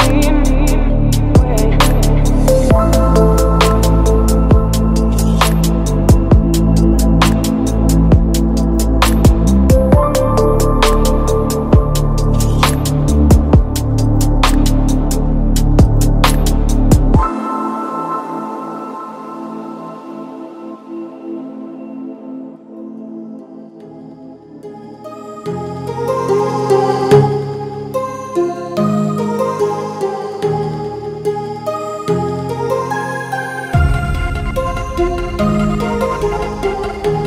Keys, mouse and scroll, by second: 0.2 Return, 0.9 Return, 0.9-2.7 drag, 2.7 middle click, 3.6 click, 4.4 Return, 6.1-7.3 typing, 7.7 Return, 8.5 s, 8.7 e, 8.9 t, 9.0 space, 11.1-13.3 middle drag, 13.3-19.7 typing, 20.0 Return, 21.5-24.5 typing, 25.4 Return, 26.2-34.7 drag, 34.7 right click, 35.3-37.2 drag.